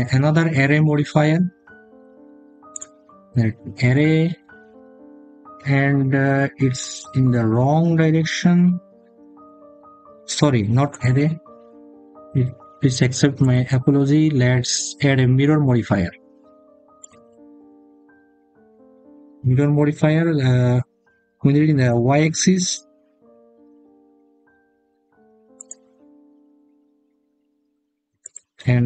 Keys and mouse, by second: 10.8 click, 13.3-18.7 drag, 25.3 click.